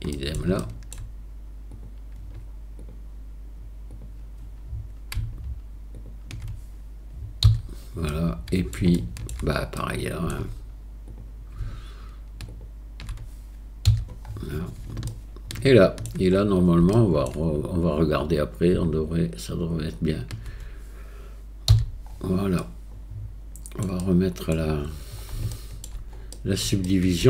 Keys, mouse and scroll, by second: 0.1 middle click, 0.6 shift+middle click, 1.7 middle click, 2.8 middle click, 3.9 middle click, 6.0 shift+click, 8.1 middle click, 9.0 shift+middle click, 9.8 middle click, 11.1 click, 12.6 shift+click, 15.1 shift+click, 16.9 shift+middle click, 22.6 click, 23.0 middle click, 24.0 middle click, 25.5 shift+middle click, 26.3 middle click, 26.9 shift+middle click.